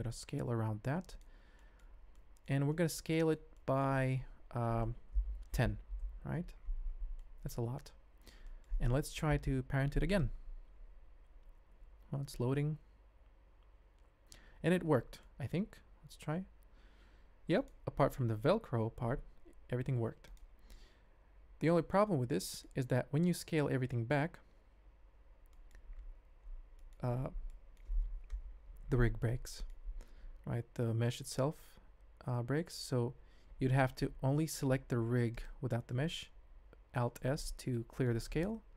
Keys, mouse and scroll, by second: 0.1 s, 1.5 shift+drag, 2.1-2.4 ctrl+middle drag, 2.7 middle drag, 3.1 shift+middle drag, 3.5 middle click, 4.2 s, 7.2-7.5 shift+middle drag, 7.5 shift+scroll up 1, 8.1 ctrl+click, 8.4 shift+click, 9.3 ctrl+p, 14.7 shift+drag, 15.8 ctrl+Tab, 16.4 g, 19.5 g, 21.2 ctrl+Tab, 21.8 shift+middle drag, 22.4 shift+middle drag, 24.9 alt+s, 25.5 shift+drag, 27.5 shift+middle drag, 28.3 KP_Decimal, 29.4 shift+drag, 29.7 middle click, 33.3 ctrl+z, 35.3 click, 36.5 alt+s, 36.9 shift+click.